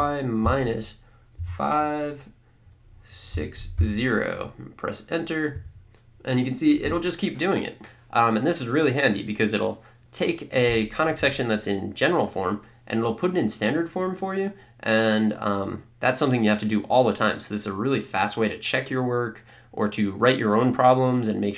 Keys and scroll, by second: 0.0-1.3 typing, 3.3 6, 3.8 0, 5.5 Return.